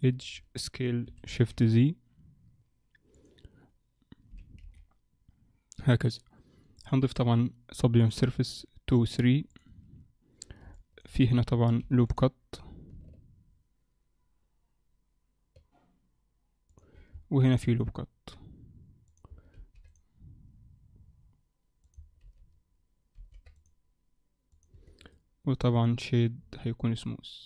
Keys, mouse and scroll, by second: 1.1 s, 4.3 g, 6.7 click, 7.0 click, 9.1 click, 9.5 click, 10.4 scroll up 1, 10.7 shift+middle click, 11.3 scroll up 1, 11.8 ctrl+r, 17.5 ctrl+r, 19.5 ctrl+r, 23.2 ctrl+r, 24.7 Tab, 25.1 right click, 26.4-27.4 scroll down 2.